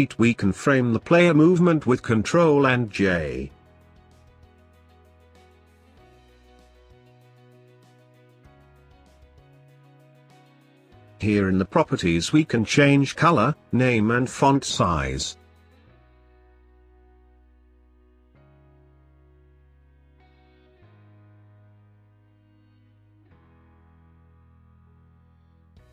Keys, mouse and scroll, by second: 1.1 ctrl+j, 3.2 click, 4.5 click, 5.0 shift+click, 5.5 shift+click, 5.8 g, 7.1 shift+click, 7.6 shift+click, 7.9 g, 9.6 click, 12.3-15.4 drag, 17.4 click, 18.4-21.0 drag, 22.5 scroll down 2, 22.7 middle click, 23.3-25.4 drag, 25.4 ctrl+s.